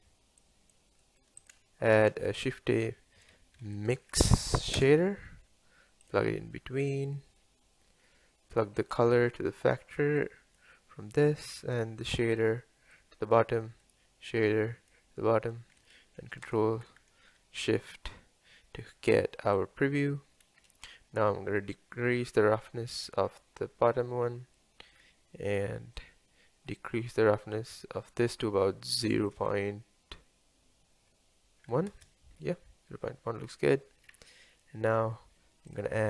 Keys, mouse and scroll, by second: 0.4 click, 7.0 scroll down 1, 8.9 drag, 10.6 click, 11.5 drag, 13.0 click, 14.9 click, 16.5 ctrl+shift+click, 22.4-24.5 drag, 24.5-27.8 middle drag, 27.8-32.0 drag, 34.0 scroll down 2.